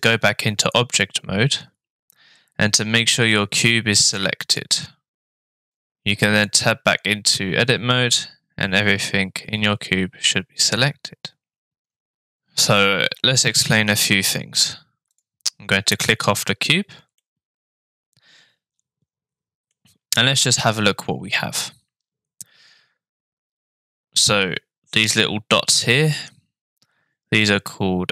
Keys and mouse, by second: 0.0 click, 4.2 click, 5.7-6.6 drag, 15.1 click, 17.3-19.7 middle drag.